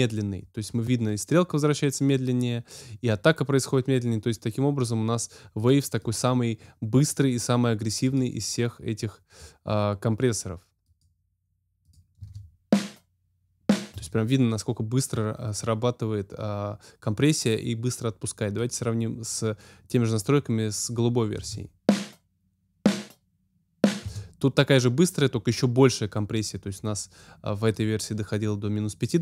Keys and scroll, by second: 12.1 space, 13.9 space, 21.3 space, 24.0 space.